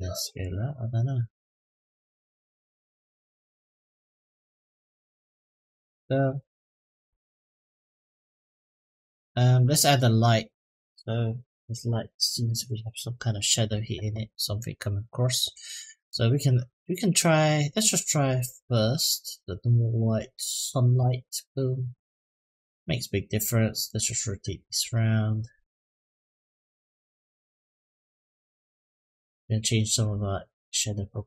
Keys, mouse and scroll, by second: 6.2-6.7 shift+middle drag, 7.2-8.0 shift+middle drag, 8.3-9.0 middle drag, 9.4 middle click, 18.0-20.9 drag, 23.6 click, 24.6-26.0 drag, 26.9-28.2 drag, 29.8 click.